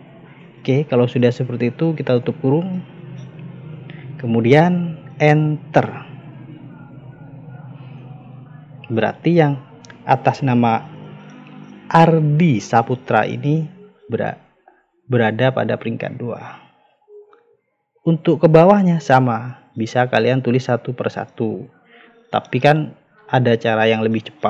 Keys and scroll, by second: 2.1 shift+0, 7.4 Return.